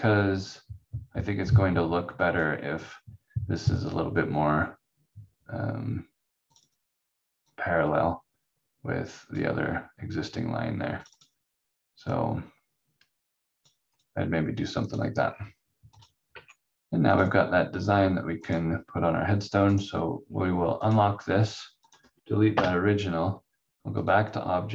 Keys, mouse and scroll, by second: 4.4 scroll up 1, 6.5 click, 15.2 scroll down 1, 15.9 click, 16.3 v, 17.1 click, 17.7-18.1 scroll down 1, 19.7 right click, 20.8 click, 22.5 Delete, 24.0 click.